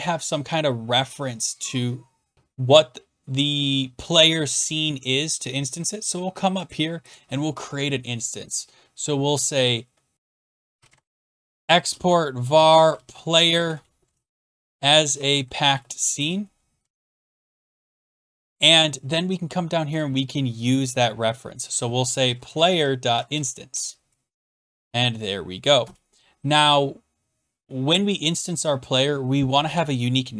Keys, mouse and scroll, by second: 2.3 click, 5.7-6.2 scroll down 10, 6.7 click, 7.1 click, 10.1-10.5 scroll, 10.5 click, 10.5-17.9 typing, 18.9-19.4 scroll, 20.0 click, 20.0 typing, 20.1 middle click, 20.7 scroll, 21.8-23.9 typing, 22.5 scroll, 24.4 Right, 24.6 Tab, 24.6 middle click, 25.8 Return.